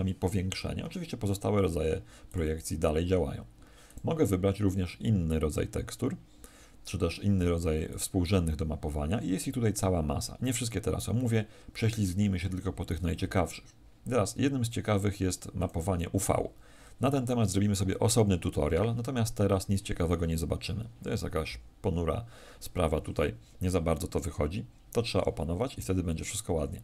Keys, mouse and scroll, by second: 2.2 click, 7.8 click.